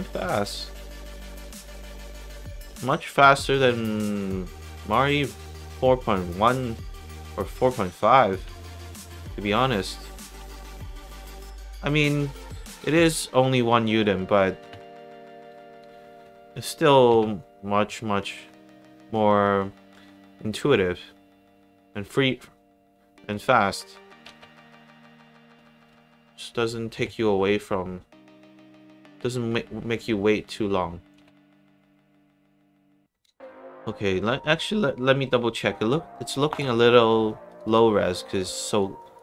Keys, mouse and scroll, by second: 0.2 b, 0.9 alt+middle click, 1.3 alt+right click, 1.7 alt+click, 2.7-3.7 drag, 4.0-5.0 drag, 5.2 click, 6.3 click, 6.9-8.0 drag, 8.3 b, 9.2 alt+middle click, 9.7 alt+click, 10.5-11.6 alt+drag, 11.8 click, 13.2-14.4 drag, 14.6 b, 15.2 click, 16.2 click, 17.1 b, 17.9 alt+middle click, 18.2 alt+click, 18.9-21.1 drag, 21.8-22.9 drag, 23.1 click, 24.2 b, 25.1 alt+middle click, 25.5 alt+click, 25.9 alt+click, 26.9 b, 27.6 alt+middle click, 27.9 alt+click, 28.3 alt+right click, 28.6 alt+click, 29.1-31.0 drag, 31.1 b, 31.7 alt+middle click, 32.0 alt+click, 32.8 alt+middle click, 33.2 alt+click, 34.1 click, 34.3 click, 34.5 click, 35.1 click, 35.3 click, 37.4 click, 37.6 click, 38.4 alt+right click, 38.9 alt+click.